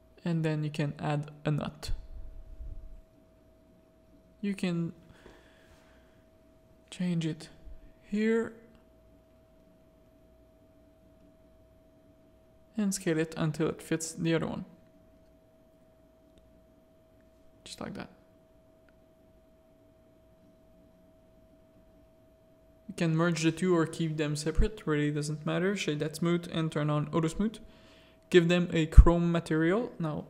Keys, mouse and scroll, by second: 4.5-5.6 drag, 7.2 s, 8.2 s, 9.1 s, 11.3 r, 13.2 s, 15.1-15.6 middle drag, 16.5-18.0 drag, 18.5 middle click, 19.9-21.2 middle drag, 22.3 shift+click, 23.2 ctrl+j, 24.3-25.3 drag, 26.8 click, 27.9 click, 28.6-28.9 middle drag, 30.1 click.